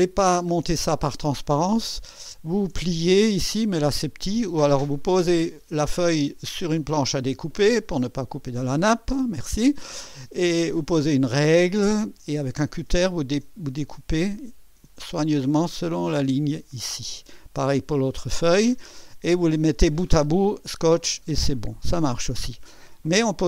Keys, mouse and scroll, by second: 0.2 ctrl+scroll down 2, 0.8 ctrl+middle click, 4.8-5.2 ctrl+scroll up 2, 6.0-8.0 middle drag, 6.8 click.